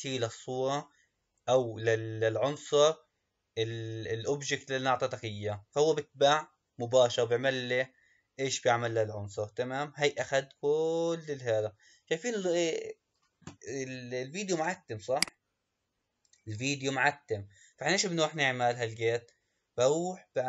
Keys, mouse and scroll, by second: 15.2 click.